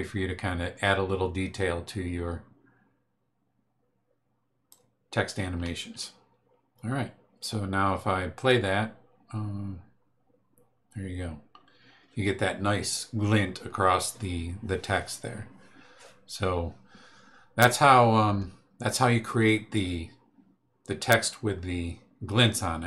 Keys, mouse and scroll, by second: 8.3 click.